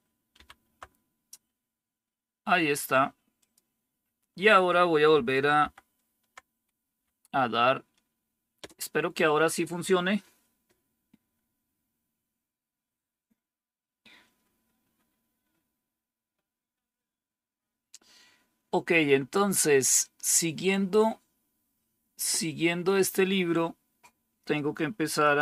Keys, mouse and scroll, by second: 0.3 super+=, 3.3 click, 5.5 ctrl++, 6.9 Up, 8.5 Return, 25.1 click.